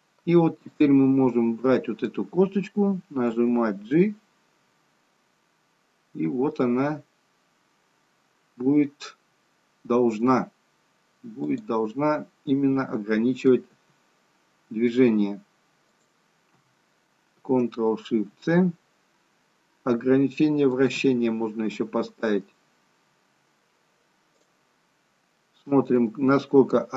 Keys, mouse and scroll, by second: 0.7 click, 1.3 middle click, 3.3 g, 11.8 middle click, 13.7 g, 18.2 ctrl+shift+c, 20.9 ctrl+shift+c, 25.4 middle click.